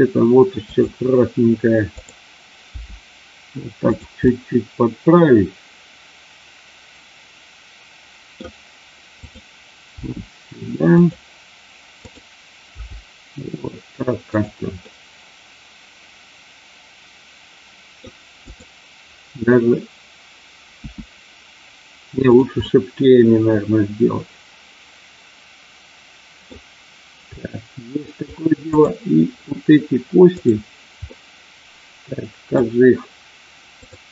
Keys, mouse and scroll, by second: 0.6 click, 2.0 click, 2.6 g, 3.8 click, 4.2-8.3 middle drag, 9.2 click, 9.8 g, 10.8 click, 12.0 click, 12.6 g, 14.2 click, 14.7 scroll up 1, 14.9-18.0 middle drag, 20.9 s, 22.5-26.5 middle drag, 27.4 middle click, 28.2 scroll down 1, 28.6 click, 30.4 click, 31.0-32.6 middle drag.